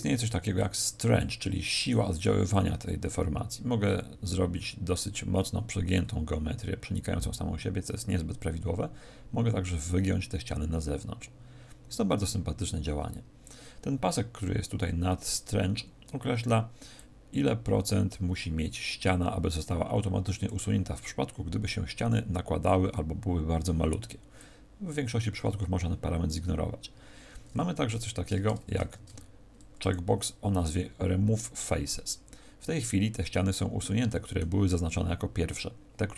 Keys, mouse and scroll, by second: 2.5 click, 16.9 click, 27.9 z, 28.7 ctrl+Tab, 31.5 middle click.